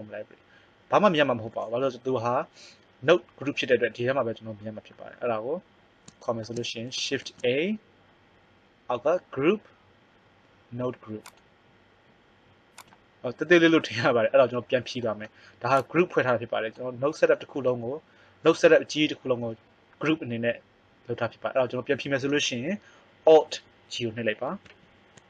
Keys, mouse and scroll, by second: 2.3-5.1 right drag, 4.7 middle click, 7.1 shift+a, 11.4 click, 12.5 click, 15.9 click, 17.1 click, 18.4-20.1 right drag, 24.6 alt+g.